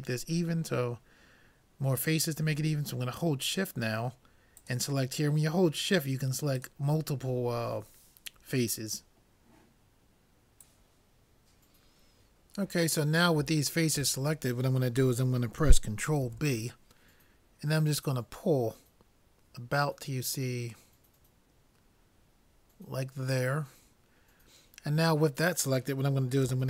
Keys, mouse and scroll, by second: 4.6-6.3 drag, 6.6-8.4 drag, 7.9-9.6 middle drag, 16.2 ctrl+b.